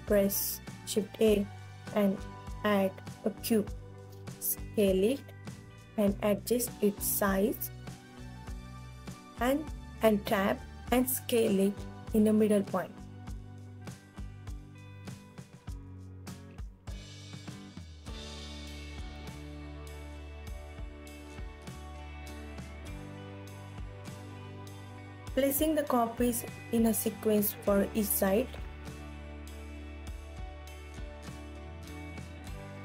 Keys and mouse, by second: 2.1 s, 3.5 click, 3.9 KP_3, 5.9 click, 6.8 s, 7.3 y, 8.4 click, 9.0 KP_1, 9.8 s, 9.8 g, 10.0 Tab, 11.7 click, 12.4 click, 13.0 alt+middle click, 13.4 alt+click, 14.5 s, 17.9 Tab, 19.3 KP_3, 21.2 g, 23.0 KP_1, 24.8 ctrl+s, 25.5 shift+click, 27.1 ctrl+s, 28.3 click, 29.4 shift+d, 31.1 shift+d, 31.8 click, 31.9 KP_3, 32.6 r.